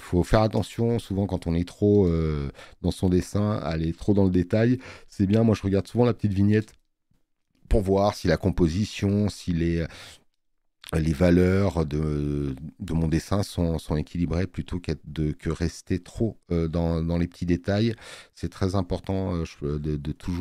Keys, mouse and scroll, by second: 1.2 click, 1.2 space.